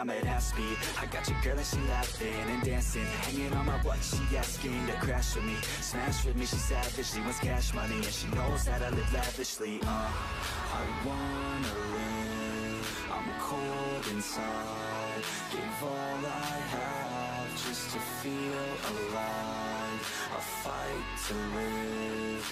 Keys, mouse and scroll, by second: 0.0 drag, 0.2 Tab, 0.4 Tab, 0.7 a, 1.0 3, 1.1-1.4 right drag, 1.4 click, 1.6 scroll down 4, 1.8 Tab, 2.0 click, 2.1-2.7 middle drag, 2.7 scroll down 4, 2.9-4.3 middle drag, 4.3 click, 4.5 Tab, 4.8 l, 5.1 s, 5.8 KP_3, 6.1 scroll up 2, 6.7 s, 7.6 middle click, 8.6 click, 8.8 Tab, 8.8 drag, 9.0-9.7 middle drag, 9.7 scroll down 2, 9.9 middle click, 10.7 ctrl+z, 10.9 ctrl+z, 11.3 ctrl+z, 11.9 g, 13.3 click, 13.4 middle click, 13.6-14.0 scroll up 4, 14.0 g, 14.3 ctrl+z, 14.6 g, 16.6 click, 16.8-17.1 scroll down 5, 17.1 click, 17.3-17.7 middle drag, 17.7 Tab, 17.8 drag, 17.9-19.0 middle drag, 19.0 scroll down 2, 19.1-20.1 middle drag.